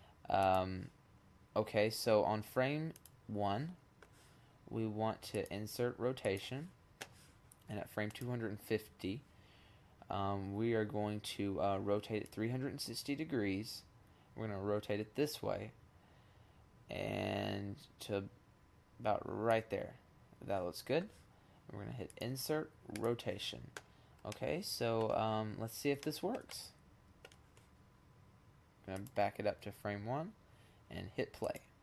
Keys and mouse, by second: 0.8-3.6 middle drag, 4.4-6.1 middle drag, 7.0 middle click, 7.9-8.8 drag, 8.9-10.5 middle drag, 10.9 click, 20.5 click, 22.7 middle click, 23.4-24.2 middle drag, 25.1 middle drag, 25.3-27.4 middle drag, 28.0-29.4 drag.